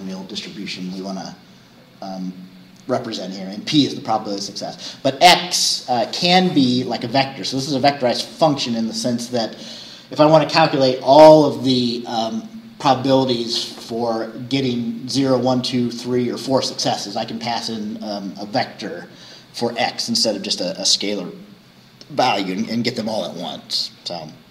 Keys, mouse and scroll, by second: 23.4 scroll down 2.